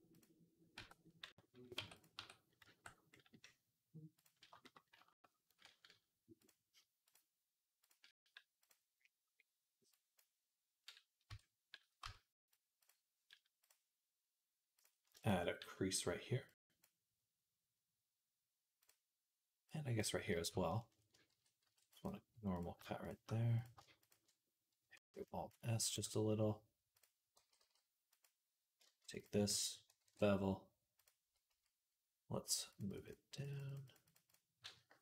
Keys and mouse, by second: 0.6 Tab, 1.6 Tab, 2.5 Tab, 2.5-4.0 ctrl+right drag, 4.1-18.7 right drag, 6.3-10.0 drag, 11.1 Tab, 11.9 Tab, 13.4-14.6 drag, 16.3-21.9 drag, 19.5-22.9 middle drag, 19.5-21.9 right drag, 21.5 ctrl+r, 22.9 alt+shift+click, 23.0 middle click, 23.8 alt+shift+click, 24.1 middle click, 24.8 alt+s, 25.0-26.8 middle drag, 26.8 click, 27.2 g, 29.0 click, 29.9 ctrl+b, 30.3-32.5 middle drag, 32.5-35.0 drag.